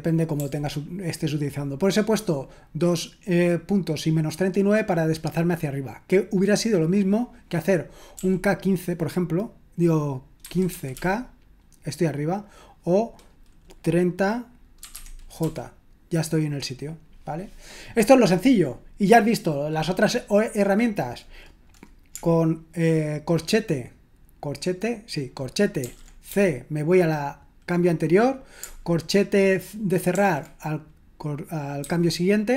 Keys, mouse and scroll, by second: 0.3 typing, 8.1 k, 10.2-11.4 typing, 14.5-15.9 typing, 25.8-26.3 typing, 30.1 typing, 31.8 typing.